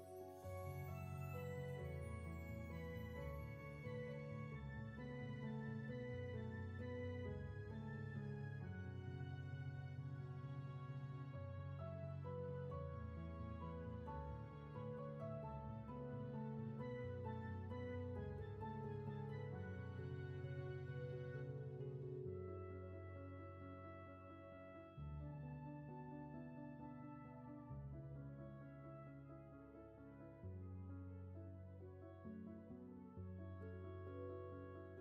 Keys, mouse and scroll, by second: 5.3 scroll down 1, 8.2 scroll up 1, 9.5 space, 14.8 ctrl+z, 21.9 ctrl+z, 24.6 ctrl+z, 28.4 ctrl+z, 30.8 ctrl+z, 33.1 ctrl+z.